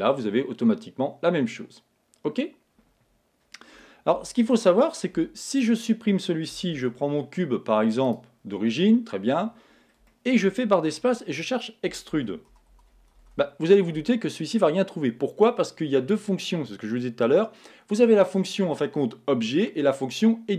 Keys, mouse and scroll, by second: 4.1 Tab, 5.1 x, 6.7 shift+a, 9.0-11.6 middle drag, 10.9 space, 11.7 middle click.